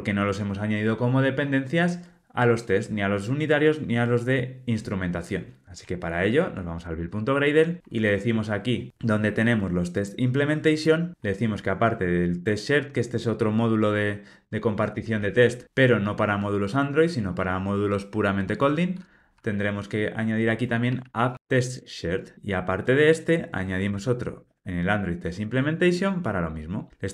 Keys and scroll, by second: 12.2 super+c, 15.1 super+v, 21.6 Tab, 22.3 super+c, 24.3 super+v.